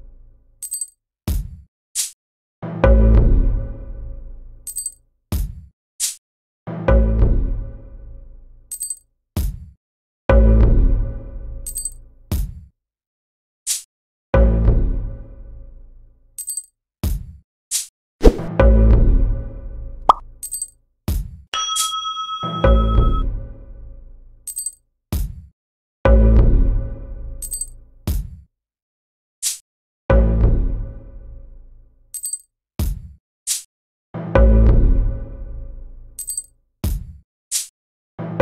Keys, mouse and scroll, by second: 1.5 click, 4.8 click, 6.6 click, 7.6-9.1 drag, 10.0 click, 10.6 click, 10.9 click, 12.5 click, 12.7 click, 13.2 middle click, 15.0-16.2 drag, 17.1 click, 17.9-20.1 drag, 20.9 click, 21.6 click, 22.7-23.8 drag, 25.1 click, 25.6 click, 26.3 click, 27.7-32.1 drag, 32.0 right click, 33.8 click, 37.0 click, 38.2 click.